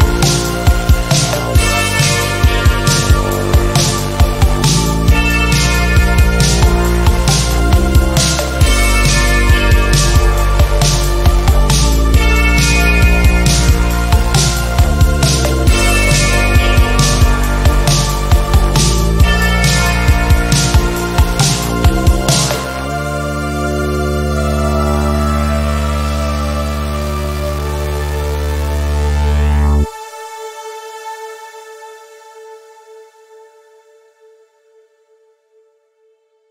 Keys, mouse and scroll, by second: 3.1-4.3 shift+drag, 4.5 click, 6.4 r, 7.2-8.5 drag, 11.1 ctrl+d, 11.6-12.9 drag, 18.4 v, 20.2 Return, 21.3 click, 21.7 shift+click, 22.7 click, 24.4 shift+click, 29.3 click, 35.8 ctrl+e.